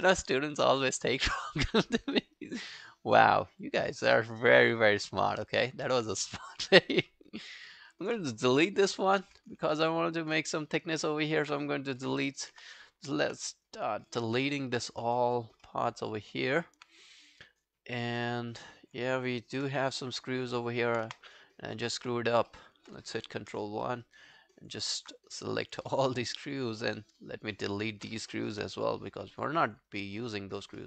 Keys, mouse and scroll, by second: 1.4 alt+middle click, 1.6 alt+right click, 1.8 alt+click, 2.2 alt+middle click, 2.4 alt+right click, 3.2 alt+middle click, 3.5 alt+right click, 3.6 alt+click, 4.7 alt+scroll down 1, 4.9 alt+click, 5.2 alt+middle click, 5.5 alt+scroll down 1, 5.7 alt+click, 6.2 right click, 7.7 alt+middle click, 7.9 alt+right click, 9.5 Delete, 9.7 alt+middle click, 10.1 alt+click, 11.3 alt+click, 12.5 space, 14.1 space, 14.8 scroll down 1, 15.7 alt+middle click, 16.0-16.3 alt+scroll up 4, 16.3 alt+middle click, 16.6-17.0 alt+scroll up 5, 17.0 right click, 20.0 scroll down 1, 20.5 alt+middle click, 20.6 alt+scroll down 1, 20.8 alt+right click, 21.1 space, 22.0 space, 22.5 alt+middle click, 23.3 ctrl+i, 23.9 alt+middle click, 24.1 alt+right click, 24.3 alt+click, 26.5 shift+click, 26.9 shift+click, 28.8 Delete, 28.8 scroll down 1, 29.4 alt+click, 29.9 alt+right click, 30.2 alt+click, 30.8 alt+middle click.